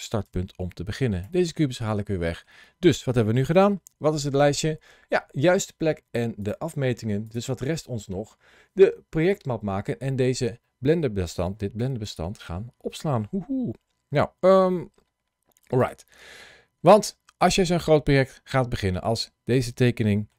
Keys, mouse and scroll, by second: 0.1 x, 1.7 middle click, 15.6 click, 18.6 middle click.